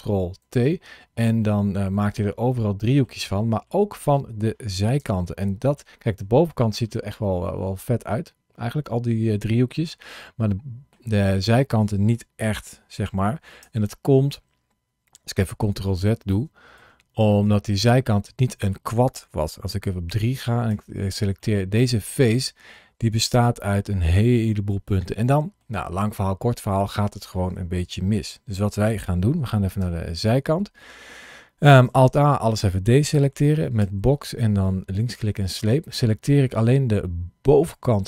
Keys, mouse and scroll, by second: 0.3 ctrl+t, 1.3 middle click, 3.2 middle click, 4.8 Tab, 5.6 middle click, 6.4 middle click, 13.5 Tab, 15.5 ctrl+z, 16.2 ctrl+z, 17.5 middle click, 19.9 3, 20.5 click, 21.2 middle click, 23.2 1, 24.5 middle click, 29.6 KP_1, 31.8 alt+a, 33.6 b.